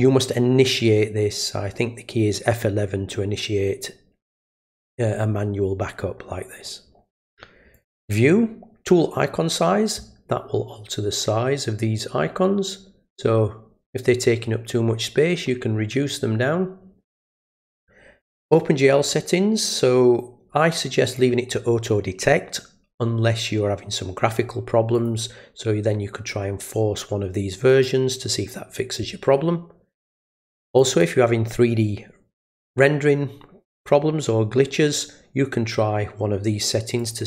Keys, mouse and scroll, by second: 7.7 click, 18.4 click, 21.1 click, 24.9 click, 27.7 click, 30.7 click, 37.0 click.